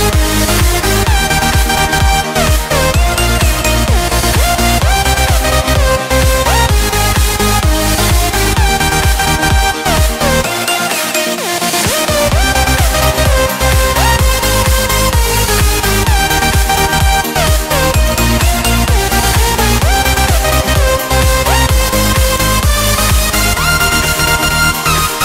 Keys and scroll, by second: 21.8 ctrl+z.